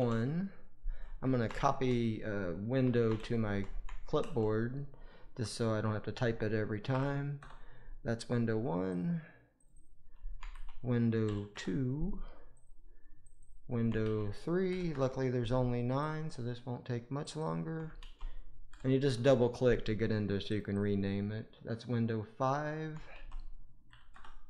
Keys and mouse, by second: 8.8 click, 9.7-11.5 drag, 12.4 click, 13.3-14.8 drag, 17.3-19.1 drag, 20.8-24.0 drag.